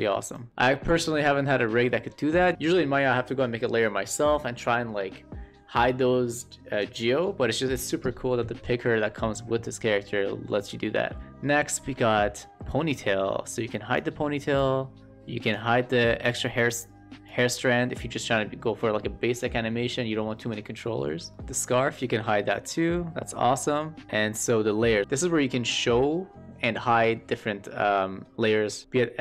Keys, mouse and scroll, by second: 0.5 shift+middle drag, 1.4-1.7 middle drag, 10.2 shift+middle click, 11.1 shift+middle drag, 11.6 shift+middle click, 12.9-13.9 drag, 14.5 click, 15.7 shift+middle click, 16.0-16.3 middle drag, 17.2 click, 21.2 shift+middle click, 21.4-21.9 drag, 22.4 shift+middle click.